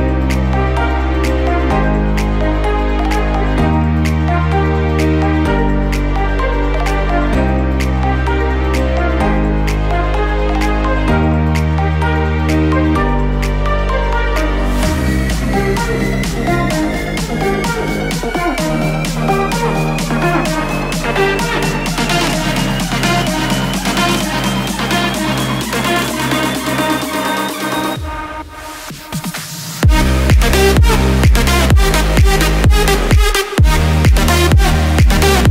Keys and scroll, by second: 16.4 ctrl+j, 22.9 ctrl+t, 27.7 ctrl+t, 35.0 ctrl+j.